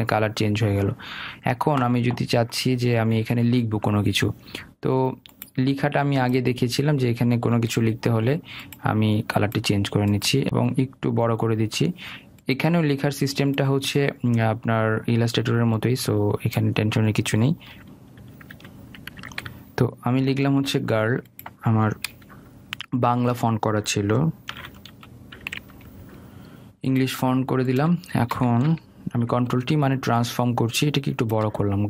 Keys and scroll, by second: 20.9 ctrl+a, 29.8 ctrl+t.